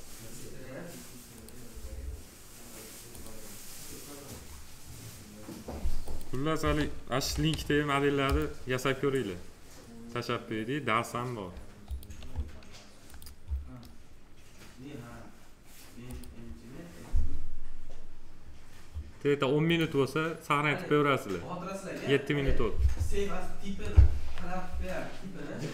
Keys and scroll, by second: 6.3-7.6 typing.